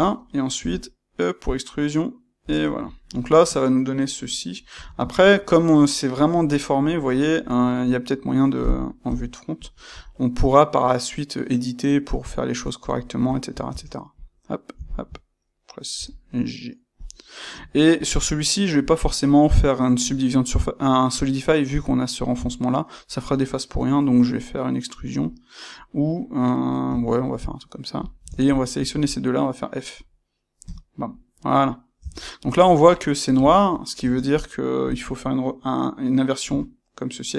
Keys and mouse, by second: 0.5 e, 2.5 click, 2.8-12.8 ctrl+middle drag, 4.6 Tab, 9.0 KP_1, 9.8 g, 12.8 click, 13.2-14.1 ctrl+middle drag, 13.6 Tab, 14.1 click, 14.8 shift+click, 15.9 g, 17.0 click, 17.6-18.8 ctrl+middle drag, 18.8 click, 28.4 shift+click, 28.8-37.3 middle drag, 30.6 f, 31.9 Tab, 33.9 space.